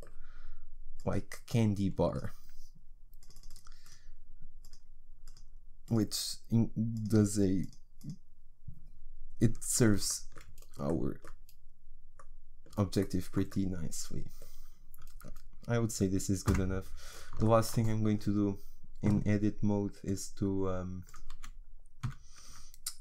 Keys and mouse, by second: 1.0-8.1 drag, 9.7-16.5 middle drag, 16.5 Tab, 20.0-22.1 drag.